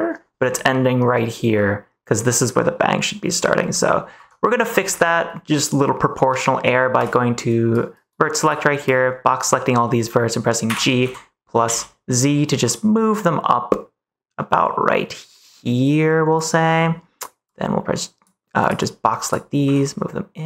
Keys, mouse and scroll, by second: 4.1 Tab, 4.5 Tab, 4.9 Tab, 6.9 click, 8.9 click, 10.6 g, 10.9 x, 11.6 z, 16.3 click, 17.5 click, 18.7 click, 19.6 g.